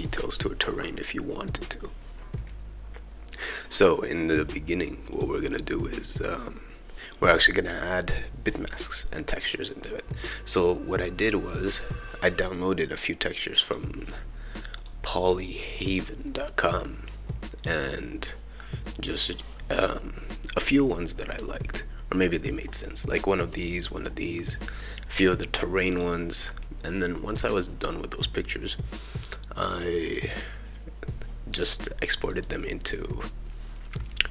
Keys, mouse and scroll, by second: 3.4-5.0 drag, 5.1 click, 9.4 click, 11.6 click, 11.7 click, 13.6 click, 14.8 click, 15.7 click, 17.8 click, 25.9 click, 27.3 click, 30.0 click.